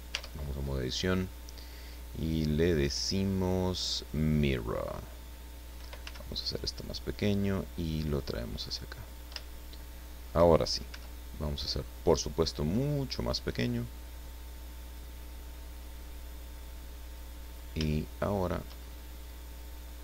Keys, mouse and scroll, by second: 0.1 Tab, 1.0 click, 4.0 click, 6.0 s, 6.8 click, 7.6-8.9 drag, 9.0-9.3 scroll up 3, 9.4-10.5 shift+middle drag, 10.9 s, 13.2 click, 14.0-15.1 drag, 16.0-17.3 drag, 17.4-17.8 scroll up 1, 17.9 shift+middle click, 18.9-19.5 shift+scroll up 3, 19.5-20.0 scroll down 4.